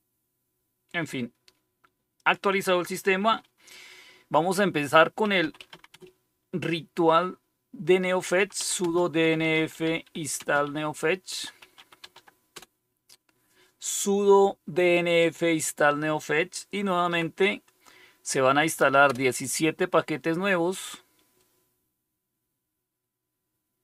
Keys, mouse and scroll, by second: 2.1 click, 4.9-6.2 typing, 7.9-13.0 typing, 17.0 typing, 19.0 Return.